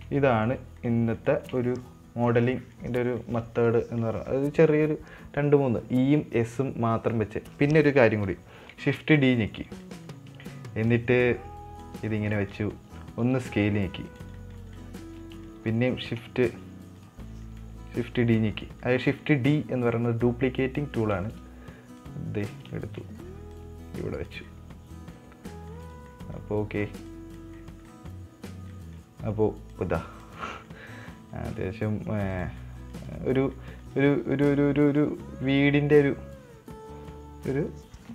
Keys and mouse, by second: 0.4-0.9 middle drag, 1.2-1.6 shift+middle drag, 1.7 shift+middle click, 2.0-2.7 middle drag, 3.0 middle drag, 4.1-4.7 middle drag, 9.0 shift+d, 10.2-10.6 middle drag, 11.3 click, 12.5-12.9 middle drag, 13.7 s, 14.7 middle click, 15.2 middle click, 16.1 shift+s, 18.5 shift+d, 19.2 middle click, 20.3 click, 21.4 middle click, 22.4 click, 23.2 shift+middle click, 23.9 click, 24.9-25.5 middle drag, 25.9 middle click, 26.2 right click, 26.5 middle drag, 27.5 click, 27.9-28.3 middle drag, 29.1 middle drag, 30.1 click, 30.7 middle click, 31.4 right click, 32.9-33.4 middle drag, 33.5 right click, 33.9 middle drag, 34.4 right click, 34.7 middle click, 35.3 right click, 35.9-37.8 middle drag.